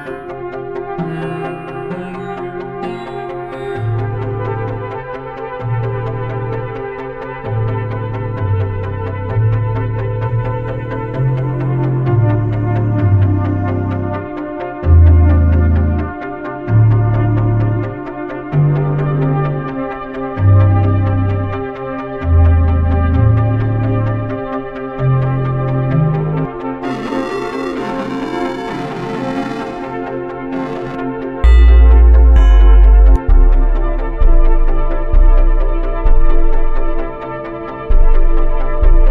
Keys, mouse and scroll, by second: 0.7-2.2 drag, 2.6-3.8 drag, 4.2-7.6 drag, 8.0-9.3 drag, 9.5-10.6 drag, 11.1-12.8 drag, 13.2-15.4 drag, 15.4 click, 15.8-17.1 drag, 20.2-22.0 drag, 22.1-22.7 drag, 22.7-24.1 drag, 36.9-39.1 drag.